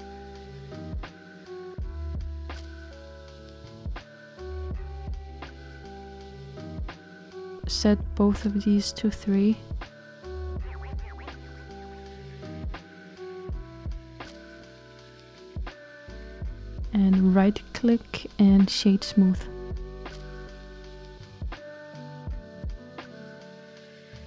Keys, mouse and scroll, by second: 1.5-2.2 scroll up 1, 2.2-3.3 scroll up 2, 3.3-9.7 middle drag, 10.4-17.4 drag, 17.4-20.2 right drag, 20.2 click.